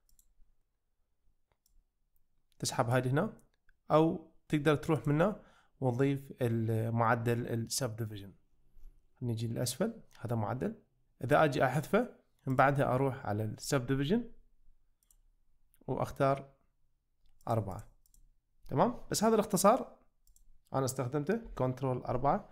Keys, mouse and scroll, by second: 1.7-3.0 drag, 5.0-10.5 drag, 11.0 ctrl+z, 12.6-15.1 drag, 17.5 click, 20.2 click, 22.1 ctrl+4.